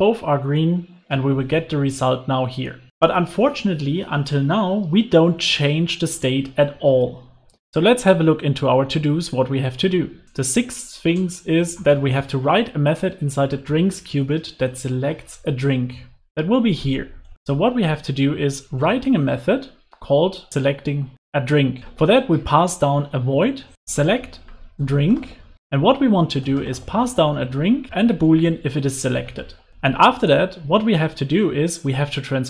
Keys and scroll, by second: 6.8 super+s.